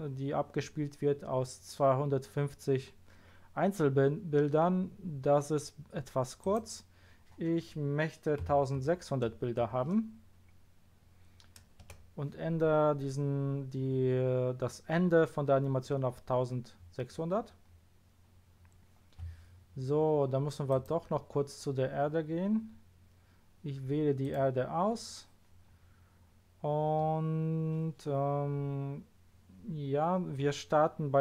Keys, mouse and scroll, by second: 6.4 click, 8.4 KP_1, 8.7 KP_6, 9.2 KP_0, 16.9-18.5 scroll down 6, 18.5 scroll up 1, 20.7 click, 24.2 click, 25.7-26.1 scroll up 1, 26.5 scroll down 1.